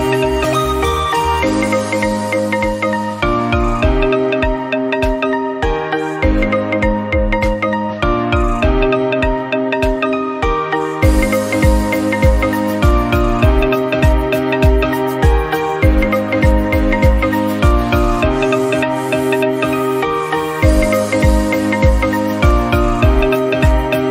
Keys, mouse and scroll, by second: 0.2 ctrl+z, 0.4 ctrl+z, 0.8 click, 2.0 click, 3.3 click, 3.6 Tab, 3.7 scroll down 1, 3.8 middle click, 4.4 scroll down 1, 4.6 middle click, 5.0 scroll up 1, 5.3 shift+middle click, 5.6 Tab, 6.0 ctrl+r, 7.1-7.5 scroll up 1, 7.5 ctrl+r, 8.5 scroll down 1, 8.8 shift+middle click, 9.0 scroll up 2, 9.2 Tab, 9.7 ctrl+r, 10.8 scroll down 1, 11.0 click, 11.2 1, 11.3 scroll up 1, 11.5 scroll down 1, 11.6 middle click, 11.9 scroll up 1, 12.2-14.0 drag, 14.0 shift+middle click, 14.9 click, 15.3 middle click, 15.7 click, 16.5 middle click, 16.9 click, 17.3 click, 18.8 click, 19.7-20.2 scroll down 1, 20.2 scroll up 2, 20.3 shift+middle click, 21.0 click, 22.2 middle click, 22.5 click, 23.1-24.1 drag.